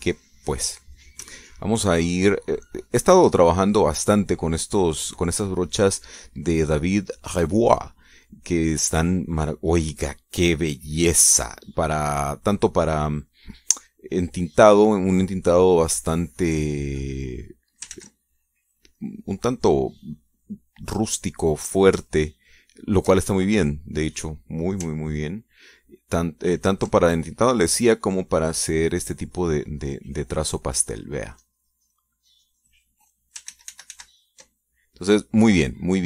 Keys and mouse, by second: 16.5 click, 17.5 click, 18.4 ctrl+z, 18.9 ctrl+middle click, 20.3 click, 22.6-23.7 shift+drag, 27.0 ctrl+click, 31.3-32.6 drag, 32.7-34.0 drag, 34.0 ctrl+z, 35.4 ctrl+click.